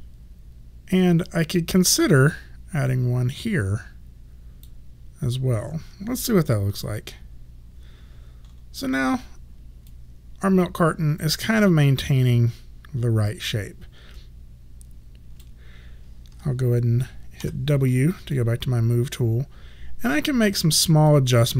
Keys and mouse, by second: 1.3 click, 6.7 3, 10.0 alt+click, 15.5 click, 18.4 alt+click, 21.2 alt+right click.